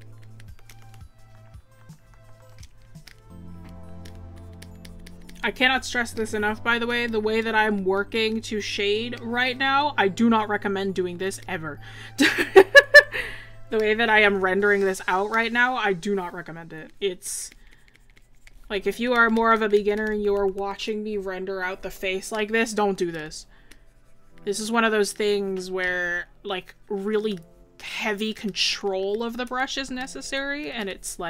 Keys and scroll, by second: 29.5 scroll down 1, 29.9 scroll up 1.